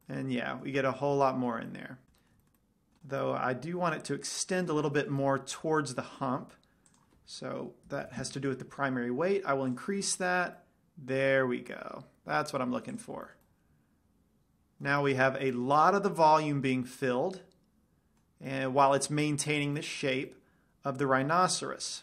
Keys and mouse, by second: 5.3-7.4 middle drag, 7.4-9.3 drag, 10.6-12.1 drag, 13.3-15.1 drag, 13.8-15.0 middle drag, 15.1-16.0 middle drag, 19.0-22.0 middle drag.